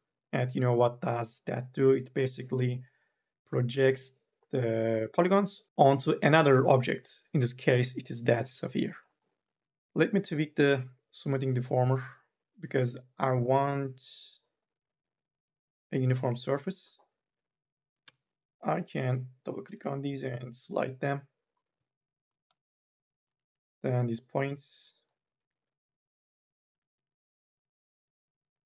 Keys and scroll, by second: 9.6 ctrl+z, 17.7 2, 17.9 e, 19.5 m, 20.0 o, 23.2 1, 25.3 2, 26.8 1.